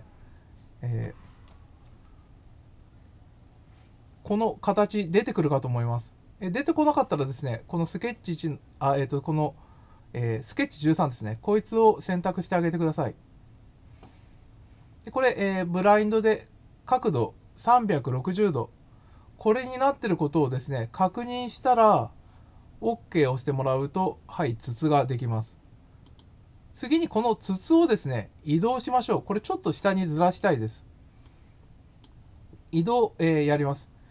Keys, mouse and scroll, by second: 21.6 scroll up 3, 23.5 click, 26.0 click, 27.5 scroll down 1, 31.2 click.